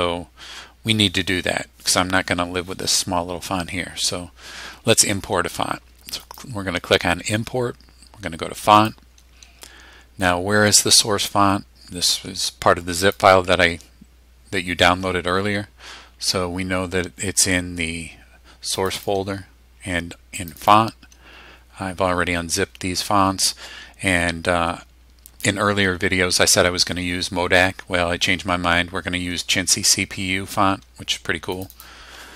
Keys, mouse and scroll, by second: 6.2 click, 8.8 click, 13.0 click, 18.8 click, 20.4 click, 31.5 click.